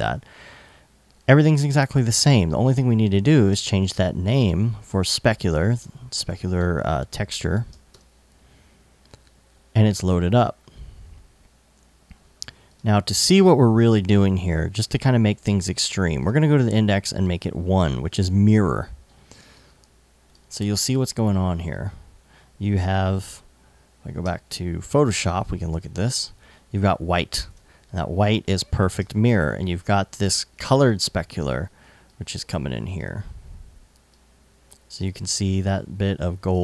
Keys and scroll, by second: 3.1 super+Tab, 5.2 super+a, 5.3 super+c, 5.9 super+Tab, 7.3 super+v, 7.5 super+Tab, 8.4 Tab, 22.8 alt+super+Tab, 23.7 super+Tab, 27.1 super+Tab, 28.6 super+Tab, 30.2 super+Tab.